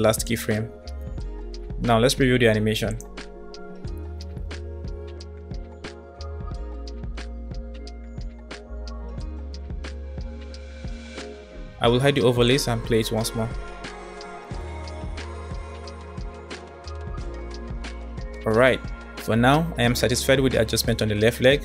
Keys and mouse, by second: 2.9 click, 3.1 space, 9.1 space, 10.9 middle drag, 12.4 click, 13.3 click, 13.5 space, 19.4 space, 20.2-21.5 middle drag.